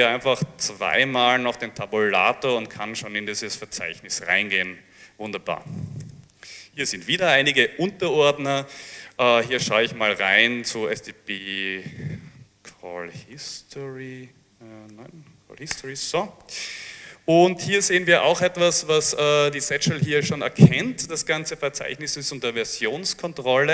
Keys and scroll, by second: 0.1 Tab, 0.9 Tab, 3.9 Return, 5.8 l, 5.9 l, 6.2 Return, 9.8-11.5 typing, 13.0-13.9 typing, 15.0 Tab, 15.8 Return.